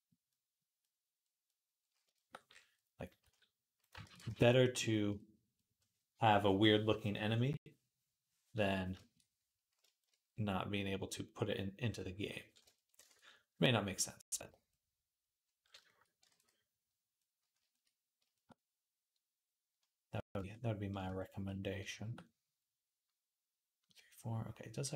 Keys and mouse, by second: 3.1 s, 3.9 ctrl+a, 4.7-15.0 middle drag, 13.0 ctrl+s, 15.0 click, 15.8 ctrl+click, 16.2 ctrl+s, 16.6-24.9 middle drag.